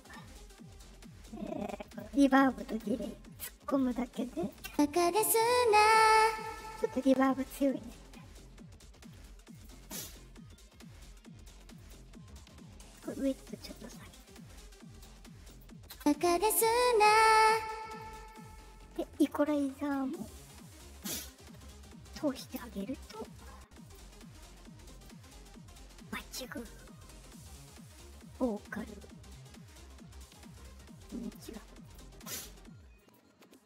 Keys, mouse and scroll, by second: 1.8 click, 2.6 click, 3.7 click, 4.6 space, 6.4 space, 9.4 click, 11.7 click, 12.9 click, 14.3 click, 15.4 click, 15.9 space, 17.9 space, 19.7 click, 22.6 click, 23.8 click, 24.8 click, 31.8 click, 32.9 click.